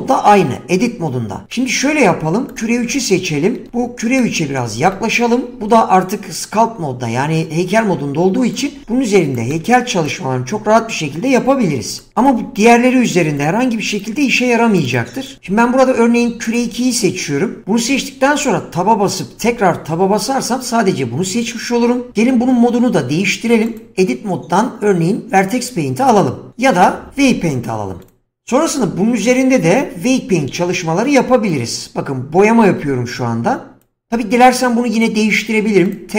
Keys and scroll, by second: 18.4 Tab.